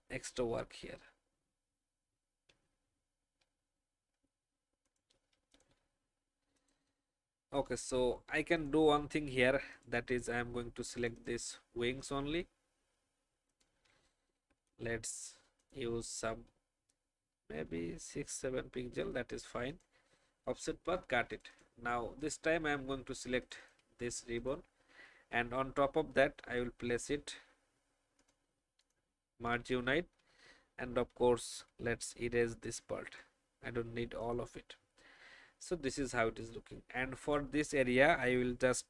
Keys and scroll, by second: 0.8 alt+shift+Up, 2.4 shift+Down, 14.3 ctrl+alt+shift+f, 20.7 ctrl+x, 30.7 alt+shift+e, 33.8 alt+shift+v.